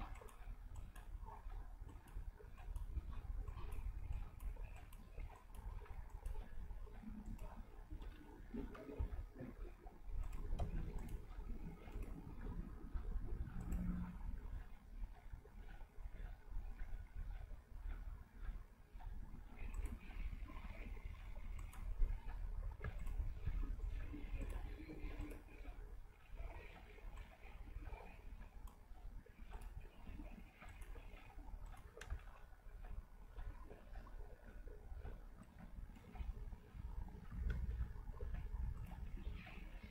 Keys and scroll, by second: 9.0 v, 37.6 ctrl+z.